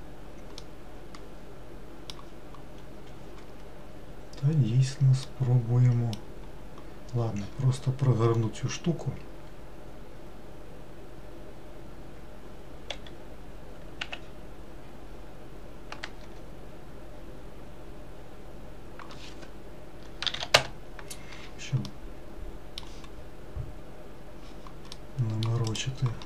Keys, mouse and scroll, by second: 0.8-2.9 middle drag, 2.9-4.3 scroll up 1, 4.3-5.0 scroll up 1, 5.0-5.5 scroll up 1, 5.5-13.2 middle drag, 13.2 r, 22.0-25.9 middle drag, 25.9 click.